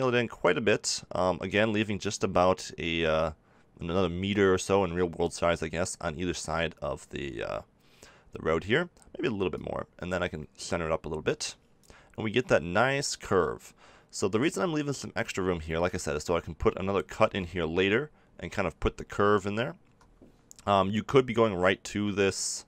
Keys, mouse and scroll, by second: 2.1-3.9 middle drag, 5.9-11.1 middle drag, 17.1 ctrl+r, 20.8-22.6 middle drag.